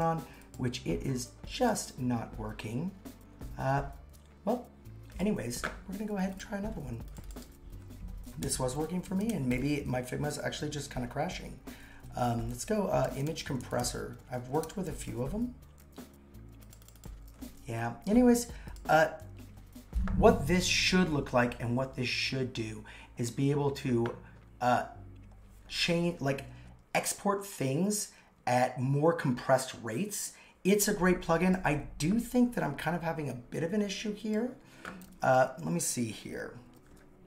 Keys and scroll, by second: 8.4-10.0 typing, 11.5-15.4 typing.